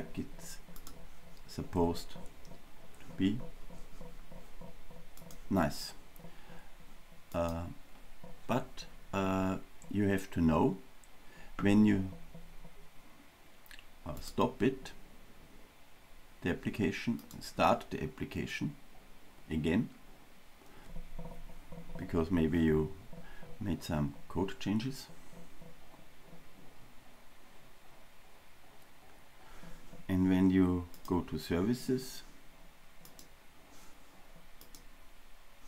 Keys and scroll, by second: 14.3 super+F2, 17.8 ctrl+r.